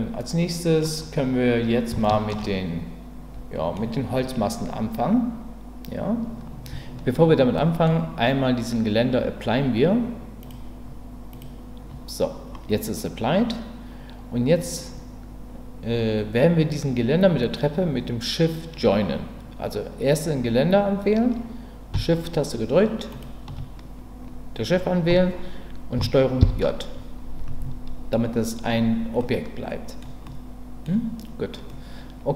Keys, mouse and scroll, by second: 2.0 shift+middle drag, 2.4-3.7 middle drag, 7.6 middle click, 10.4-11.4 drag, 26.4 ctrl+j, 29.2-30.0 middle drag, 30.2-30.8 middle drag, 31.7-32.3 middle drag.